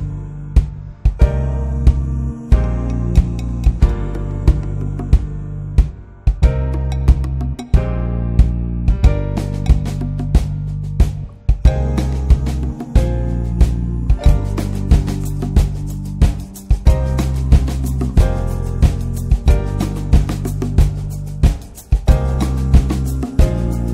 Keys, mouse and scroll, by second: 0.0 scroll up 2, 0.2 shift+middle click, 0.5-2.1 drag, 2.3 click, 3.0 scroll down 3, 3.2 alt+middle click, 4.0 click, 4.3-5.0 scroll up 4, 4.5 shift+middle click, 5.0-6.7 drag, 6.7 scroll down 2, 7.1 alt+middle click, 7.9 scroll up 2, 8.1 shift+middle click, 8.5 click, 8.9 click, 9.9 alt+middle click, 10.3 shift+middle click, 10.7 click, 11.0 click, 12.2 click, 13.1 alt+middle click, 13.7 shift+middle click, 13.9 click, 15.1 click, 15.5 click, 16.4 scroll down 1, 16.6 middle click, 16.8 alt+z, 17.0 click, 17.2 middle click, 17.4 Tab, 17.7 click, 18.0 ctrl+1, 18.3 ctrl+2, 18.6 click, 19.3 click, 19.9 click, 20.1 middle click, 20.5 ctrl+s, 20.7 click, 21.0-21.3 scroll up 1, 21.3 ctrl+1, 21.8 drag, 22.1 scroll up 2, 22.3-22.6 shift+middle drag, 22.6-23.9 drag.